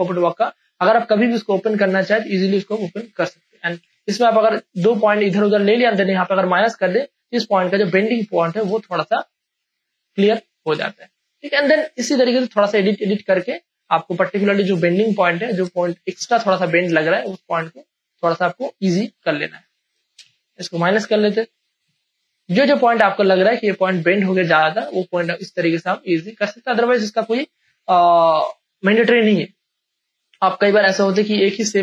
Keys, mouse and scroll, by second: 0.6 click, 6.7 alt+click, 8.7 space, 9.0 ctrl+click, 9.0 ctrl+click, 9.9 click, 10.8 space, 11.0 ctrl+click, 12.4 ctrl+click, 15.7 space, 15.9 ctrl+click, 16.5 ctrl+space, 17.1 click, 17.1-19.4 drag, 20.0 ctrl+space, 20.5 alt+click, 21.1 ctrl+alt+space, 21.2 ctrl+click, 21.8 click, 21.8 space, 22.5 click, 23.8 ctrl+click, 25.0-29.4 ctrl+drag, 30.9 ctrl+click.